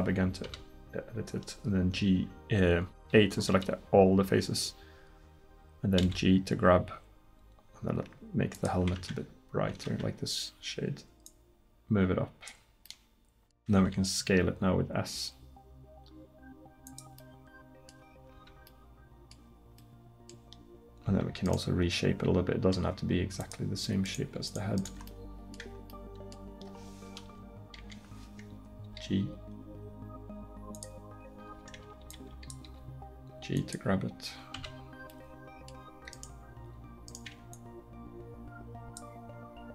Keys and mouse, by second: 0.5 a, 6.0 g, 9.8 g, 13.8 s, 18.4 Tab, 21.1 Tab, 27.2 KP_1, 27.8 KP_3, 28.9 g, 31.5 a, 32.1 b, 32.7 g, 34.6 a, 36.2 right click, 38.1-39.7 right drag.